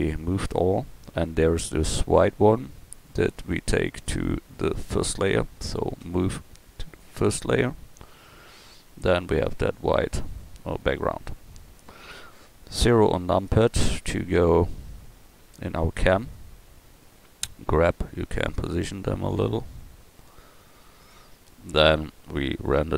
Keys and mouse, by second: 6.0 m, 11.4 middle click, 12.8 KP_0, 16.2 click, 17.7 g.